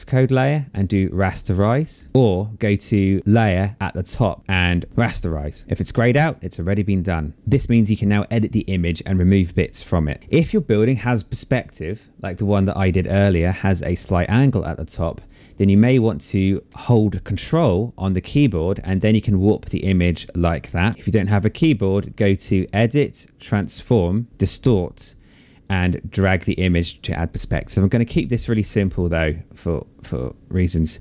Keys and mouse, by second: 0.5 click, 1.6 ctrl+z, 3.2 click, 4.9 click, 7.4 click, 11.4 click, 14.4 click, 15.4 click, 16.7 ctrl+click, 20.0 ctrl+z, 21.5 click, 24.3 click, 24.8 click.